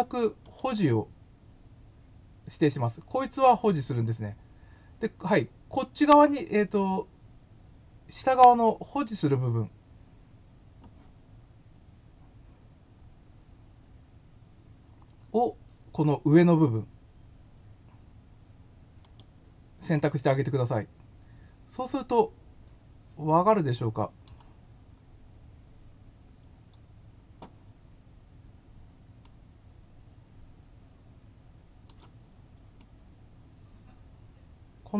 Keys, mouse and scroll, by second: 0.4 click, 11.7 scroll up 1, 19.0 click, 19.9-21.7 middle drag, 25.0 scroll, 29.2-31.8 middle drag, 32.8-34.9 middle drag.